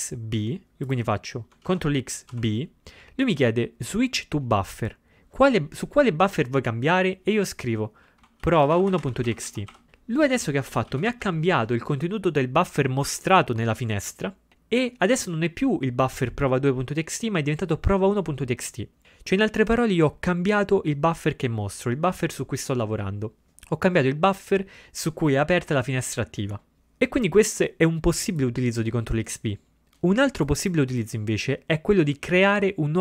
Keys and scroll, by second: 1.8 ctrl+x, 2.4 b, 8.6-10.2 typing, 10.7 ctrl+x, 10.8 ctrl++, 10.9 ctrl+x.